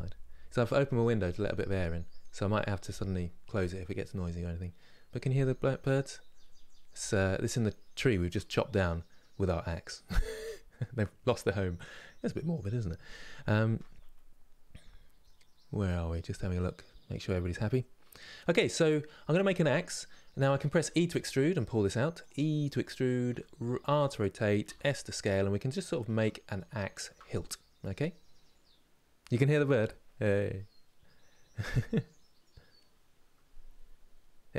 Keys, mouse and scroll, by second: 10.9 click, 26.2-29.3 shift+middle drag, 32.0-33.2 scroll down 1.